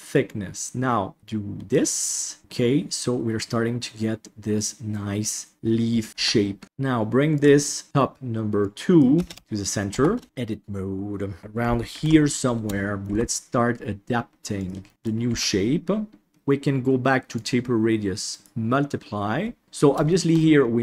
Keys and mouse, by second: 2.1-5.5 middle drag, 6.1 Tab, 6.6 ctrl+z, 7.3 click, 7.8 F2, 9.3 BackSpace, 9.9 Tab, 10.3 shift+middle click, 10.6 middle click, 11.9 ctrl+KP_1, 12.7 shift+middle click, 13.0 g, 14.9 middle click, 15.2 g, 17.5-18.4 drag, 20.1 shift+middle click, 20.5 middle click.